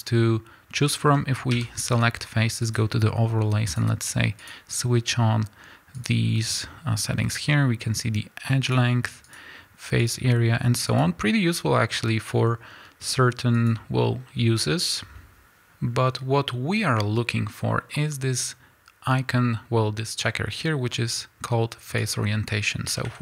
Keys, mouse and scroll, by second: 1.5 a, 18.0 a, 21.8-23.2 drag, 22.9 a.